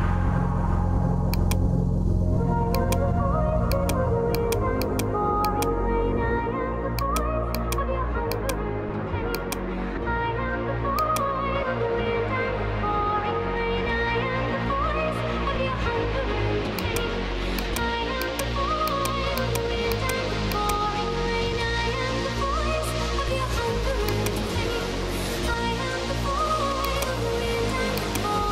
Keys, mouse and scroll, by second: 1.4 click, 2.9 click, 3.9 click, 4.5 click, 4.9 click, 5.5 click, 7.1 click, 7.6 click, 8.4 click, 9.4 click, 11.1 click, 12.2-13.6 typing, 16.9 click, 17.9 click, 18.3 click, 18.9 click, 19.4 click, 20.0 click, 20.8 click, 24.2 click, 26.9 click, 28.1 click.